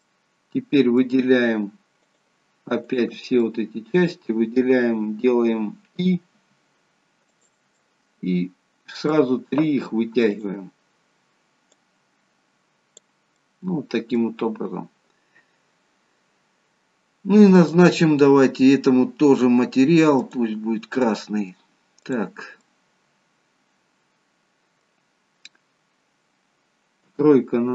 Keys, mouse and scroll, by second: 0.0 middle click, 2.0 shift+click, 2.9 shift+click, 3.5 middle click, 6.3 i, 7.7 middle click, 10.3 click, 11.9 click, 13.4 middle click, 17.5 click, 21.0 middle click, 21.9 click, 22.6 middle click, 27.1 KP_3.